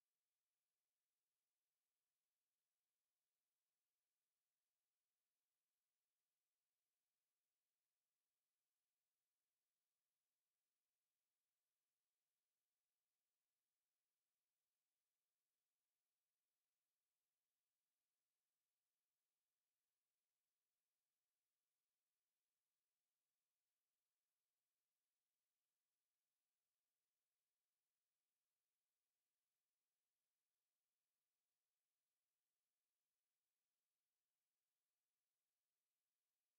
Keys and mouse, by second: 0.9 w, 1.6 alt+click, 3.9 click, 6.7 -, 7.3 Return, 8.7 click, 9.1 alt+click, 10.1 alt+click, 12.4 click, 14.0 ctrl+shift+h, 14.1 ctrl+shift+h, 18.3 click, 20.9 alt+click, 21.4 alt+right click, 21.9 alt+middle click, 25.7 alt+click, 26.8 alt+middle click, 28.8 ctrl+shift+s, 28.9 ctrl+shift+s, 32.1 Delete, 32.7 2, 33.0 Return, 36.1 click.